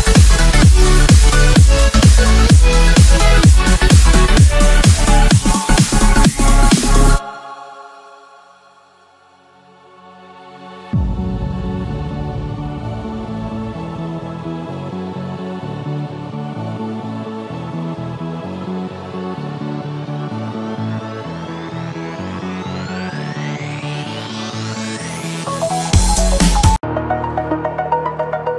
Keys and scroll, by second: 2.1 ctrl+v, 19.7 ctrl+space, 26.8 ctrl+space, 28.1 ctrl+0.